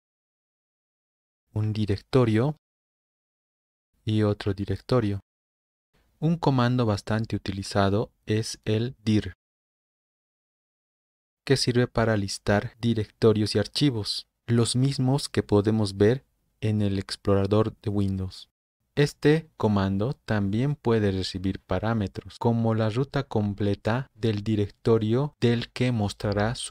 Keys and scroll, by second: 0.0 Right, 0.3 Right, 1.1 shift+Right, 1.3 shift+Right, 1.5 shift+Right, 1.7 shift+Right, 1.9 shift+Right, 3.0 Right, 3.7 shift+Right, 4.0 shift+Right, 4.6 End, 9.9-10.9 typing, 11.2 Return.